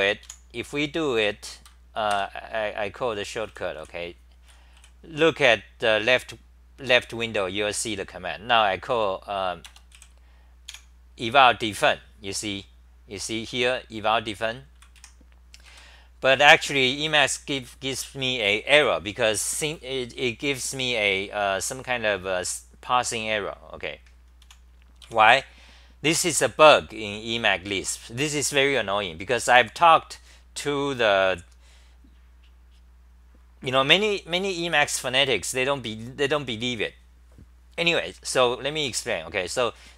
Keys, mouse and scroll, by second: 0.7 a, 2.1 ctrl+g, 3.5 w, 6.1 typing, 15.9 typing, 24.4 u, 25.0 q, 25.3 Home.